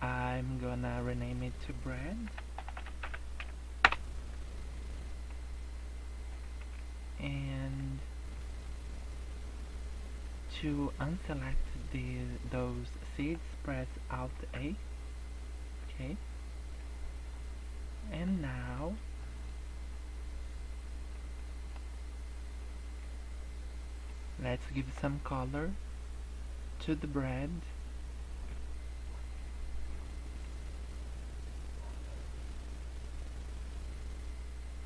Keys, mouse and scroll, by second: 1.0 click, 5.1-6.2 scroll down 15, 6.2-7.3 scroll up 8, 7.5 shift+middle click, 8.2 scroll up 2, 9.3-10.1 scroll up 1, 10.3 scroll up 2, 14.3 alt+a, 16.3-16.7 scroll down 6, 16.8 middle click, 17.5 scroll up 3, 17.9 middle click, 18.5 middle click, 18.9 scroll down 2, 19.2 middle click, 20.7-21.3 scroll up 5, 21.3 middle click, 21.8 scroll up 2, 23.7 middle click, 24.3 scroll up 1, 30.0 scroll down 5, 30.1-31.1 scroll up 3, 31.2 scroll down 1, 31.9 scroll up 1, 32.7 scroll down 1.